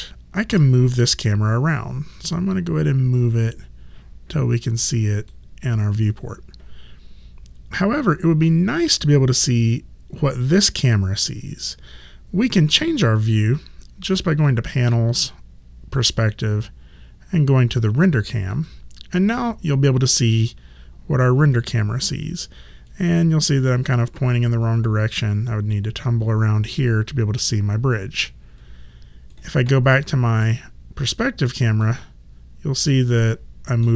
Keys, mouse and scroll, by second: 0.5 w, 2.2 click, 14.3 click, 18.5 click, 22.9 alt+click, 27.5 alt+right click, 30.5 click, 33.1 alt+middle click.